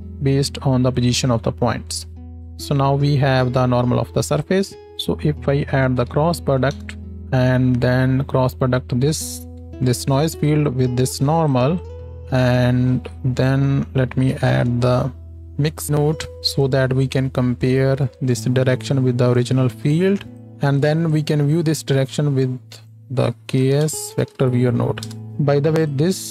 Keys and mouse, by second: 1.0-2.3 drag, 4.9-20.8 drag, 5.1-7.2 middle drag, 5.1-7.2 right drag, 8.0-16.3 middle drag, 8.0-16.3 right drag, 16.6-20.5 middle drag, 16.6-20.5 right drag, 25.9 click.